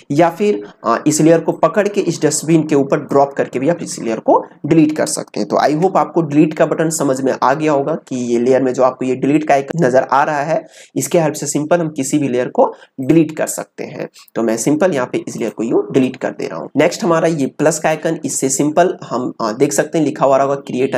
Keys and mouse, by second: 1.4-5.6 drag, 5.6 ctrl+z, 13.0 click, 13.0 typing, 15.1 typing, 15.3 click.